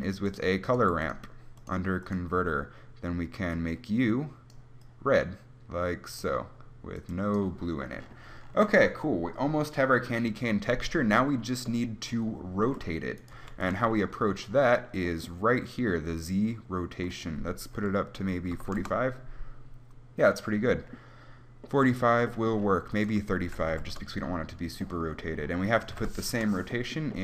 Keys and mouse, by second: 1.0 g, 13.5-17.0 right drag, 13.6 g.